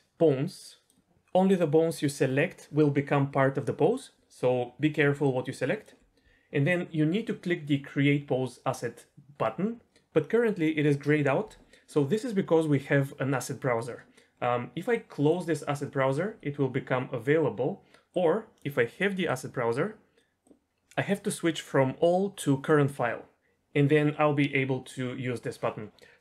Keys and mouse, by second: 5.2-5.8 ctrl+drag, 14.9 click, 18.1 click, 19.2 click, 20.1 click, 21.7-22.7 drag.